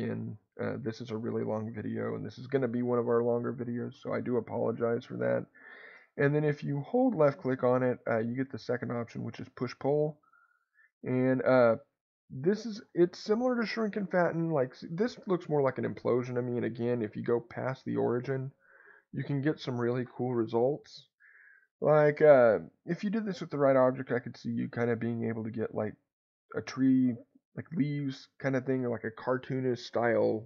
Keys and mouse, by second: 0.0 click, 6.5 click, 9.1 click, 10.2-30.4 drag.